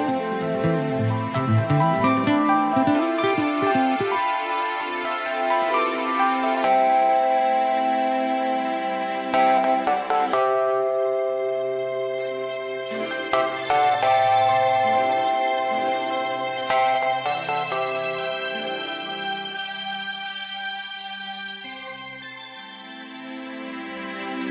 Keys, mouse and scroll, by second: 3.7 right click, 7.5 click.